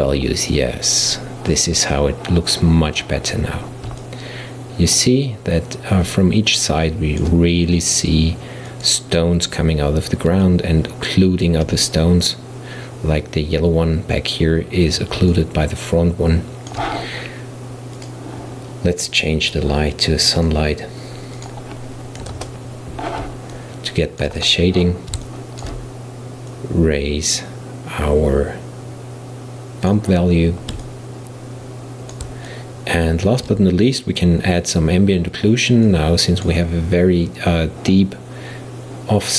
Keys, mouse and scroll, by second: 4.0-8.3 middle drag, 8.7-10.5 drag, 10.5-13.5 middle drag, 15.4-18.0 middle drag, 18.0 click, 19.5-20.5 drag, 21.4-23.6 drag, 23.6-24.5 middle drag, 24.5 right click, 25.3-26.5 shift+middle drag, 26.5-29.6 drag, 29.6-35.5 middle drag, 35.9 click.